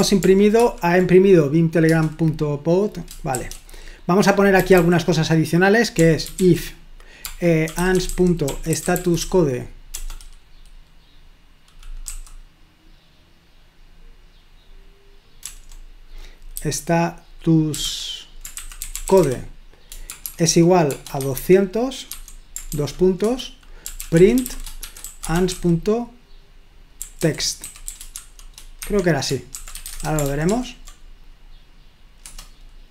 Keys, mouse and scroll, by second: 0.2 ctrl+p, 0.6 ctrl+p, 2.0 Return, 3.4 shift+g, 4.7 typing, 6.1-9.1 typing, 10.6 BackSpace, 12.6 typing, 15.4 BackSpace, 15.6 BackSpace, 16.6 typing, 17.7-30.4 typing, 28.8 Escape, 30.5 ctrl+p, 32.2 Return.